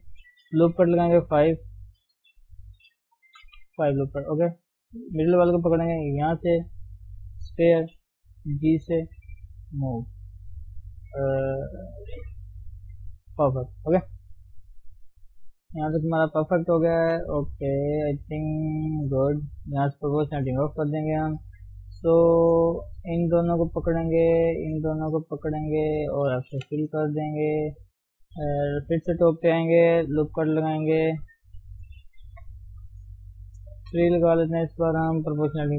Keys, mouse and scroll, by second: 0.5 ctrl+r, 3.3 ctrl+r, 5.0 click, 7.3 click, 8.0 g, 13.6 scroll down 1, 13.8 scroll up 1, 14.0 shift+middle click, 14.3-15.4 scroll down 3, 15.4 KP_7, 15.8-16.3 scroll up 1, 16.3 shift+middle click, 16.5 scroll down 1, 16.7 middle click, 17.4 KP_3, 17.8 scroll down 1, 18.0 scroll up 1, 18.6 scroll down 1, 18.9 scroll up 1, 20.5 o, 21.0 scroll up 1, 21.2-23.0 shift+middle drag, 23.0 click, 24.5 shift+click, 25.2 shift+click, 26.7 f, 26.8-27.1 scroll down 1, 27.1-28.2 middle drag, 28.2 KP_7, 28.5-29.3 scroll up 3, 29.7 ctrl+r, 31.5 ctrl+z, 32.3 ctrl+r.